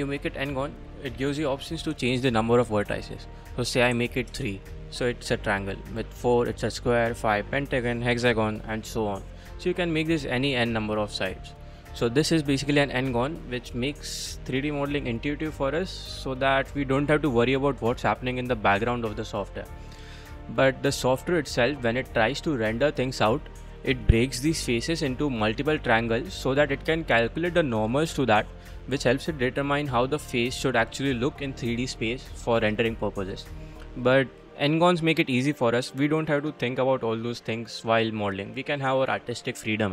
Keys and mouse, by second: 3.2-4.6 drag, 5.8 click, 6.7 click, 7.6 click, 8.2 click, 8.5 click, 9.2-12.0 drag, 19.4 click, 20.3-21.1 middle drag, 21.3-21.6 middle drag, 22.5-22.9 middle drag, 33.9 middle click, 34.2 middle click, 34.7-35.3 middle drag, 37.9-38.3 middle drag.